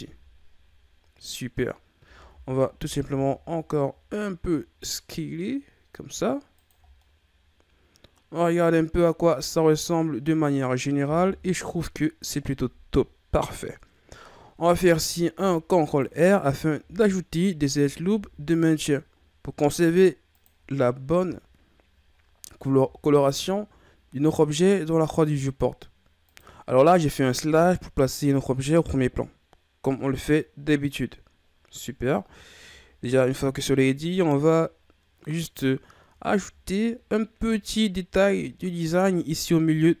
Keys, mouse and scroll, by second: 0.0 z, 1.5-2.0 scroll up 1, 2.0 a, 2.3 a, 2.8 s, 6.9 scroll down 2, 7.0-10.0 middle drag, 11.2 KP_1, 15.4 ctrl+r, 16.8-18.1 scroll up 5, 18.1 ctrl+r, 21.2 KP_Divide, 22.8 ctrl+r, 32.5-32.9 ctrl+scroll down 1, 32.9-33.8 scroll up 1, 33.8-36.0 ctrl+scroll up 1, 37.4 KP_Divide, 38.7-40.0 ctrl+scroll up 3.